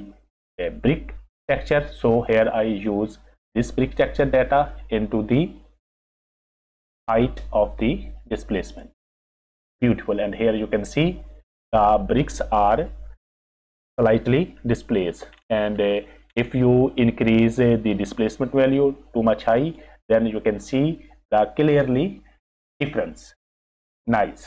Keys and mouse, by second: 3.8 click, 4.0-8.8 drag, 14.8 click, 15.9 click, 19.6 click.